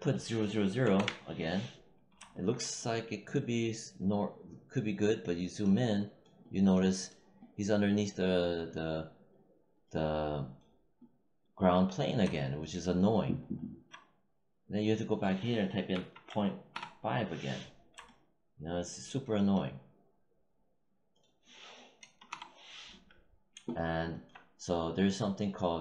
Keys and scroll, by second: 0.7 0, 0.8 Return, 15.8 ., 16.2 5, 16.6 Return, 21.9 0, 22.2 Return.